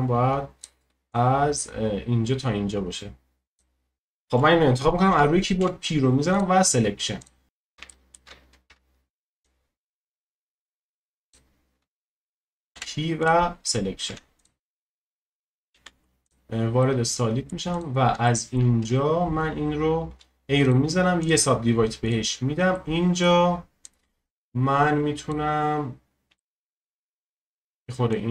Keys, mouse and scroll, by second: 5.6 p, 7.2 click, 7.4-7.9 scroll up 1, 7.9 shift+middle click, 8.7 Tab, 9.4 click, 12.7 p, 14.1 Tab, 14.4-15.7 drag, 15.7 z, 16.8-17.7 middle drag, 17.7-18.3 drag, 18.3-18.8 shift+middle drag, 18.8 Tab, 19.4-20.1 scroll up 1, 20.1 a, 20.6-22.0 right drag, 22.0 click, 22.7-23.8 middle drag, 23.8-25.9 drag, 25.9-26.4 scroll up 1, 26.4-28.1 shift+middle drag, 28.1-28.3 drag.